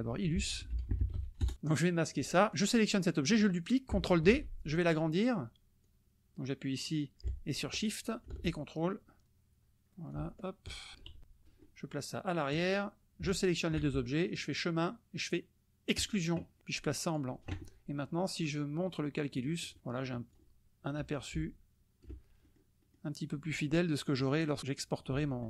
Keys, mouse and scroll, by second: 0.6 ctrl+i, 0.7 ctrl+l, 1.0 ctrl+u, 1.4 ctrl+Return, 2.1 click, 2.5 click, 4.3 ctrl+d, 5.9-9.6 drag, 10.1-11.0 shift+drag, 11.2 shift+KP_Subtract, 12.5 click, 13.3 shift+click, 14.4 click, 16.1 click, 17.1 click, 19.4 click, 20.3 click, 21.3-22.2 ctrl+drag, 22.4 ctrl+click, 24.3 click.